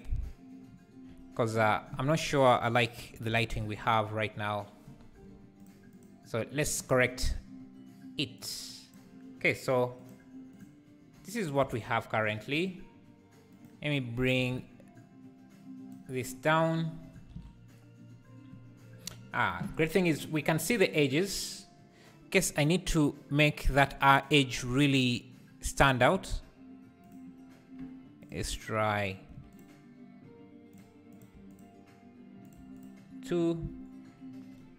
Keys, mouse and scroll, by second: 8.4-10.1 drag, 14.6-22.6 shift+drag, 26.0 click, 27.0 click, 29.5 click, 30.7 click, 31.5 click, 32.7 click.